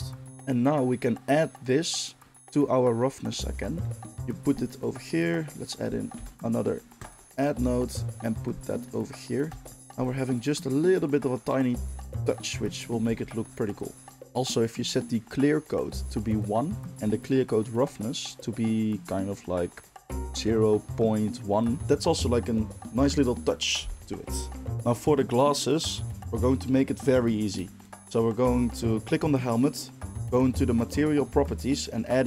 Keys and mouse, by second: 4.1 g, 4.7 middle click, 5.5 click, 5.6-7.9 shift+middle drag, 6.1 shift+d, 7.9-10.3 drag, 9.8 ctrl+shift+middle click, 10.3-12.7 middle drag, 12.7 click, 13.5 middle drag, 13.7 click, 13.8 middle click, 14.2-27.9 drag, 27.9-32.2 middle drag.